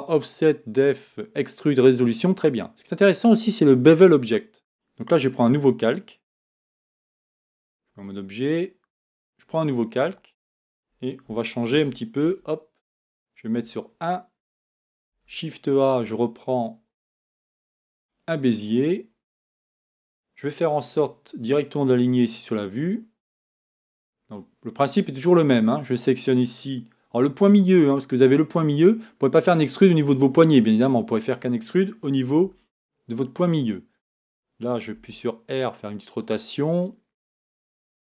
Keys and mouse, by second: 7.4 Tab, 10.7-12.2 drag, 12.2 shift+c, 13.6 KP_1, 15.1 shift+a, 23.8 Tab, 32.4 e, 34.9 r.